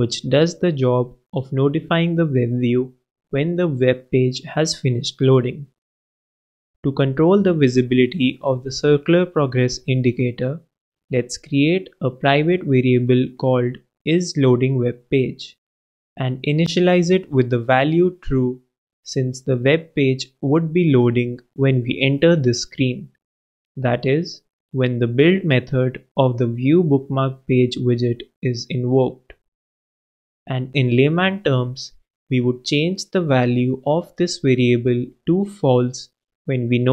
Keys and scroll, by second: 4.5 shift+p, 4.7 shift+Return, 13.5-16.8 typing, 34.5 super+c, 36.3 super+Right, 36.4 super+v.